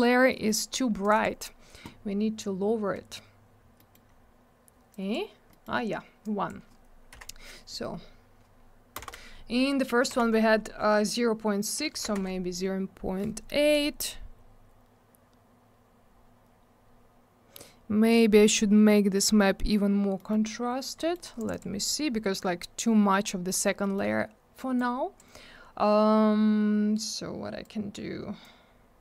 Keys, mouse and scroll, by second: 0.3 middle click, 0.4 middle click, 1.0 click, 1.0 click, 1.1 click, 1.2 double click, 3.7 middle click, 3.9 middle click, 4.0-4.9 scroll down 1, 4.9 click, 5.5 middle click, 5.6 middle click, 6.2 click, 7.1 0, 9.0 shift+/, 12.1 Return, 14.4-15.6 scroll up 1, 16.6-18.7 scroll down 1, 20.1 middle click, 20.3 middle click, 20.4 scroll up 1, 20.9 middle click, 21.1 middle click, 21.3 click, 21.4 click, 21.5 click, 21.5 double click, 23.8 middle click, 23.9 middle click, 24.7 click, 27.6 click, 28.4 click.